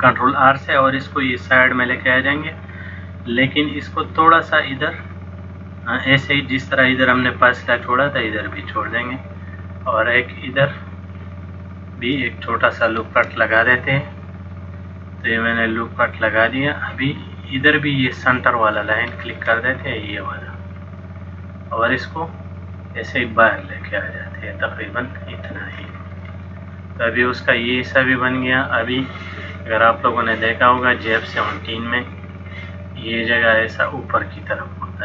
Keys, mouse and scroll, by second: 8.6 click, 13.1 ctrl+r, 16.9 click, 17.4 middle click, 19.2 click, 20.4 click, 21.0 middle click, 22.7 click, 26.2 middle click, 32.4 click, 33.8 click, 34.4 click.